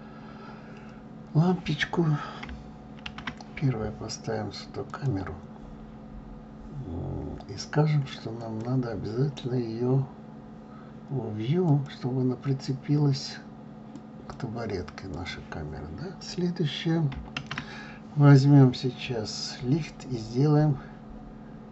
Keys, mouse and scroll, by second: 5.1 shift+a, 8.7-15.1 drag.